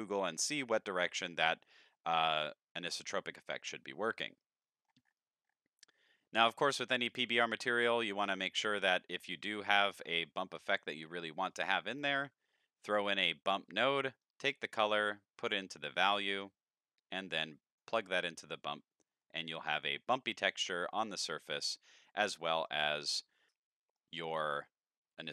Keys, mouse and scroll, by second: 0.5-1.2 middle drag, 1.3 shift+middle click, 4.6 middle click, 5.2-6.1 scroll down 9, 6.1 middle click, 7.1-7.7 drag, 8.1-9.1 scroll up 8, 9.1 click, 10.0 shift+a, 11.5 click, 11.9 click, 13.2 click, 14.2-15.5 drag, 16.0 middle click, 17.2-17.7 drag, 19.2 middle drag, 19.5-22.5 middle drag, 22.7 middle click, 23.5 middle click, 24.0-25.3 middle drag.